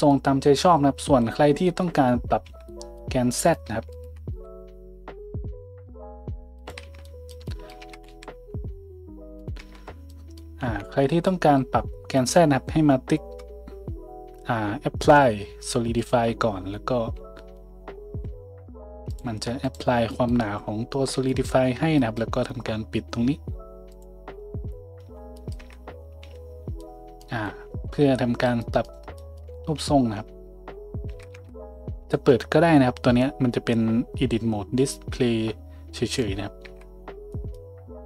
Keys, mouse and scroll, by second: 2.4 Tab, 3.4 click, 3.9 shift+click, 4.3 s, 6.8 Tab, 7.8 Tab, 8.1 s, 9.6 Tab, 9.6-16.1 middle drag, 10.6 `, 16.1-24.0 drag, 17.5 z, 18.1 z, 24.0-28.6 middle drag, 25.0 z, 25.6 Tab, 26.2 a, 29.7 Tab, 31.1 Tab, 36.1 click, 36.6 Tab.